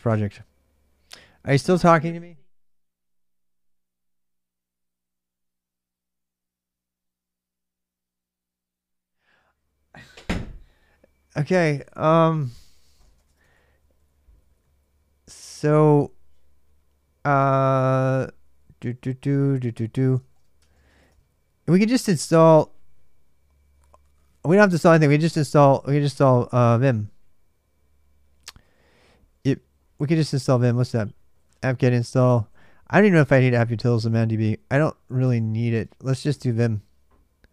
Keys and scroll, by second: 12.6-13.8 typing, 17.0-21.5 typing, 20.0 ctrl+[, 24.7 typing, 26.7 typing, 28.3 ctrl+[, 28.4 ctrl+j, 28.5-37.5 typing, 29.9 ctrl+[, 29.9 ctrl+j, 32.3 ctrl+j, 33.5 ctrl+[, 37.4 ctrl+[.